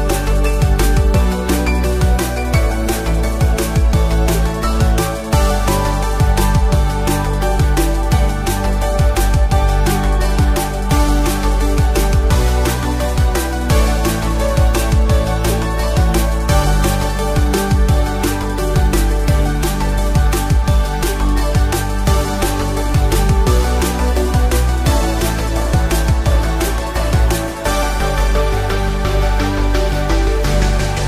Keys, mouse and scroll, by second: 0.8 f, 5.3-7.1 scroll down 3, 7.5 l, 8.9 click, 9.4-13.5 typing, 14.8-19.9 typing, 20.3-22.6 right drag, 22.6 click, 23.6-25.7 right drag, 26.0 scroll down 2, 27.0-28.3 middle drag, 28.7 Tab.